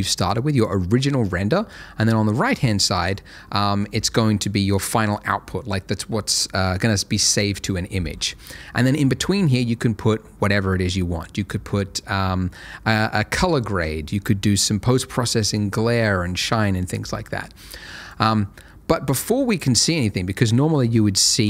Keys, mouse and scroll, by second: 1.7 click, 18.1 click.